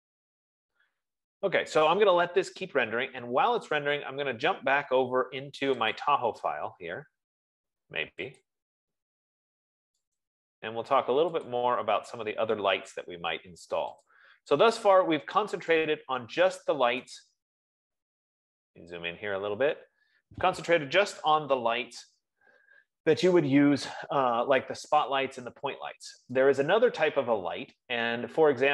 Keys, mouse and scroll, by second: 6.5 click, 8.8 click, 10.7 right click, 12.0 click, 14.7 click, 18.6 right click, 19.0 scroll, 19.7 scroll, 20.3-20.8 scroll, 21.3-21.8 scroll, 22.2 Escape, 22.9 F15.